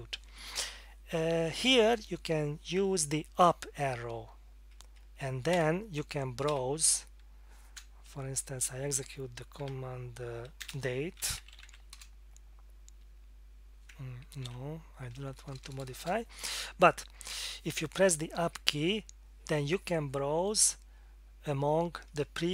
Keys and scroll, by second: 6.5 Up, 7.8-9.6 typing, 11.0-12.1 typing, 14.4 ctrl+c, 15.4 Return, 15.6 Return, 15.8 Return, 15.9 Return, 16.0 Return, 18.4 Up.